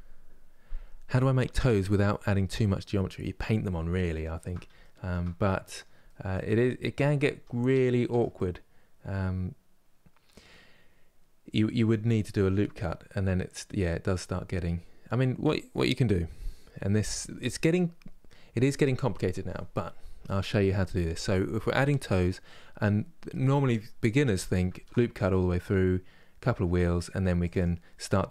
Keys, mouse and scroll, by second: 2.8-3.7 scroll down 1, 3.7-6.3 shift+middle drag, 6.3 scroll up 2, 7.1 Tab, 8.0-24.4 middle drag, 24.4 ctrl+r.